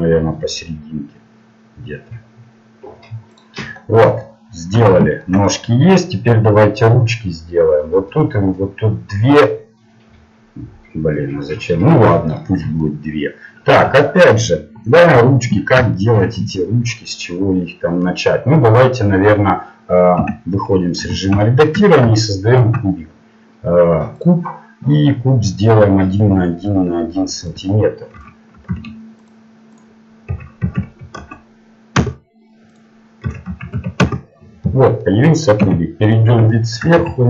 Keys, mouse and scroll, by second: 3.8-6.3 middle drag, 12.6 middle click, 20.2 Tab, 21.0 z, 24.2 shift+a, 29.2-32.0 drag, 34.1 click, 34.6 middle click, 35.6 KP_7, 37.0 z.